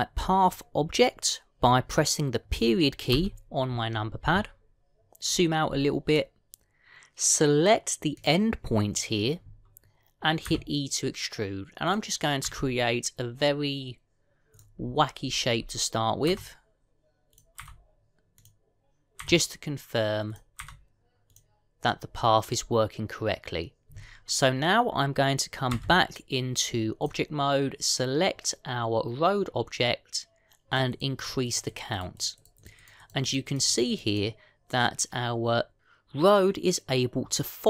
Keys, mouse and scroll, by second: 4.0 KP_Decimal, 6.0-7.0 scroll down 6, 9.0 click, 11.3 e, 13.3 e, 15.7-16.5 scroll down 7, 17.1 e, 18.5 e, 20.7 e, 21.5 e, 26.6 Tab, 27.9 click, 31.6 click, 31.8-32.5 click, 32.1 click, 32.7-33.2 click, 33.0 click, 33.6 click, 34.5 click, 34.9 click.